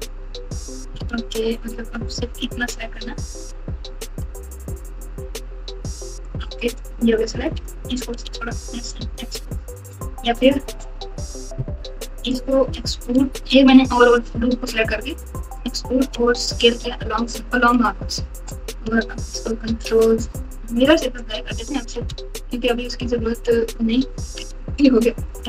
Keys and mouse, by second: 0.9 alt+z, 2.5 click, 4.4 3, 5.8 click, 8.2 s, 15.2 e, 16.2 s, 19.2 ctrl+z, 22.0 Tab, 22.5 Tab, 24.2 ctrl+a.